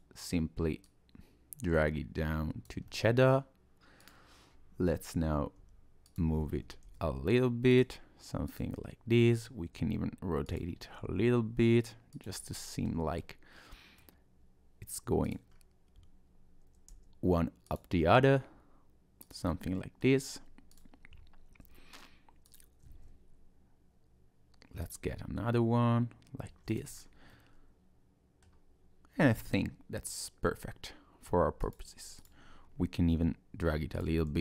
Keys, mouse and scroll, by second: 0.8 click, 2.9 middle click, 4.0 click, 4.3-5.5 scroll down 3, 5.5 g, 6.9 shift+d, 8.6 click, 9.7 r, 11.0 g, 12.4 middle click, 13.2 middle click, 15.2 click, 15.5-16.7 scroll up 2, 16.9 r, 18.2 g, 19.5 middle click, 20.7 click, 22.5 click, 23.0 shift+d, 25.1 middle click, 26.7 click, 26.9-27.3 scroll down 2, 27.3 middle click, 29.2 middle click, 31.6 click, 32.2 click, 33.0 g, 34.2 middle click.